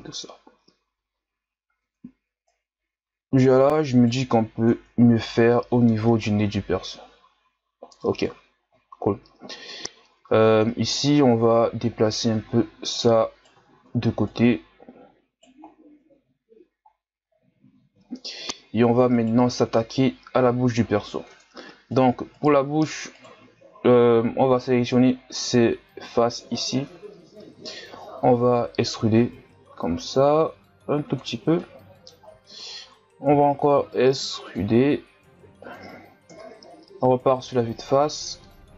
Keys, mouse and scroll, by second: 0.2-1.1 scroll down 5, 1.3-1.8 scroll up 7, 1.8 Tab, 2.5 right click, 4.7 Tab, 5.1-6.1 scroll down 4, 6.1-6.4 scroll down 3, 7.2-7.9 scroll up 7, 7.9-8.9 scroll down 7, 8.9-10.2 shift+scroll up 14, 10.2 Tab, 11.0 right click, 12.4-13.0 shift+scroll up 6, 13.0 right click, 13.7-14.3 shift+scroll up 5, 14.3 right click, 15.6-16.0 scroll down 1, 16.0 Tab, 16.9-18.0 shift+scroll down 12, 18.0-18.5 shift+scroll down 2, 18.5-19.1 scroll up 2, 19.1 right click, 19.5 Tab, 21.3 ctrl+Tab, 22.3 right click, 23.1 shift+right click, 23.8-25.3 scroll down 3, 25.3 scroll up 2, 26.3-26.9 scroll down 1, 26.9-27.7 scroll up 2, 28.3 e, 31.4 scroll down 1, 31.6 middle click, 32.4-33.1 scroll up 2, 33.4 e, 36.3 KP_1, 37.9 ctrl+KP_Add, 38.4 ctrl+KP_Add.